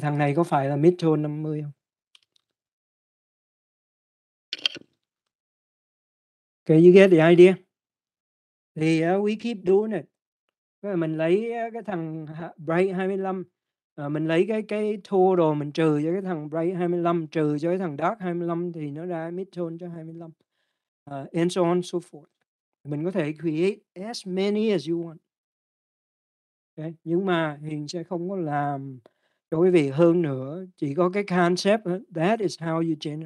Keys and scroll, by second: 2.8-7.9 typing, 8.5 Return.